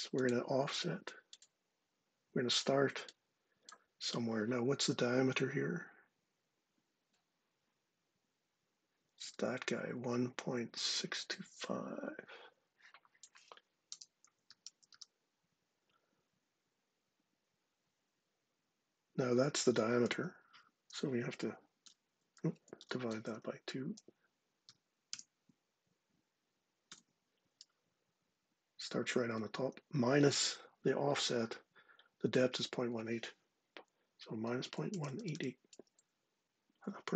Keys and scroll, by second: 13.3-15.0 typing, 20.0 Left, 20.2-24.8 typing, 23.0 Right, 26.5 shift+0, 33.8-35.4 typing.